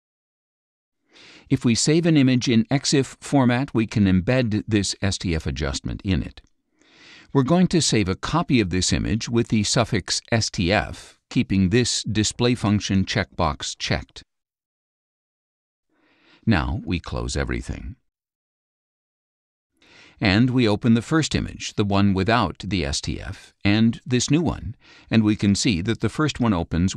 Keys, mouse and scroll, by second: 6.5 ctrl+shift+s, 8.5 click, 10.2-11.4 typing, 11.5 Return, 12.3 click, 13.0 click, 14.8 click, 15.0 middle click, 15.0 scroll, 18.3 click, 19.9 click, 23.5 click, 24.6 ctrl+middle click, 24.6-25.0 ctrl+scroll, 25.6 ctrl+click, 26.0-26.9 middle drag, 26.0-26.9 scroll.